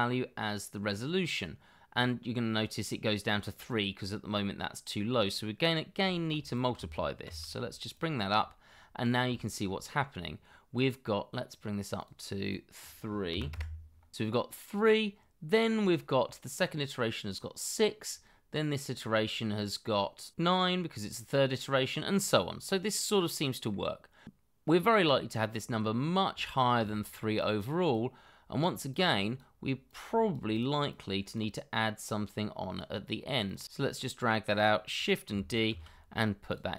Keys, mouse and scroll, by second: 5.8 scroll down 1, 6.1 shift+middle click, 7.2 shift+d, 8.6 scroll up 1, 9.3 shift+middle click, 11.9 double click, 13.3 3, 13.5 Return, 18.0-20.2 scroll down 1, 22.9 middle click, 24.2-25.5 scroll up 1, 26.9 scroll down 1, 27.2 shift+middle click, 30.9 double click, 33.6 ctrl+z, 34.9 double click, 35.7 shift+d.